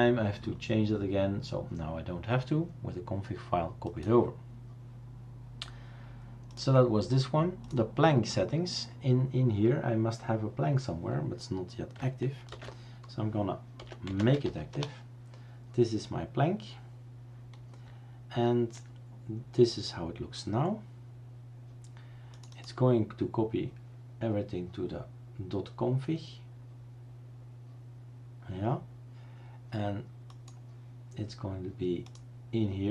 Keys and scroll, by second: 12.6 shift+super+d, 13.7-14.9 typing.